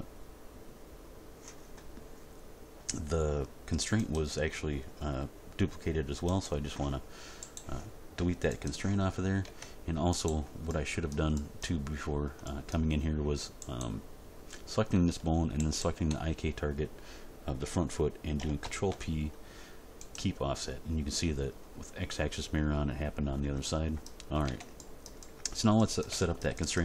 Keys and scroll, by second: 9.4 Tab, 18.6 ctrl+p, 24.4 Tab.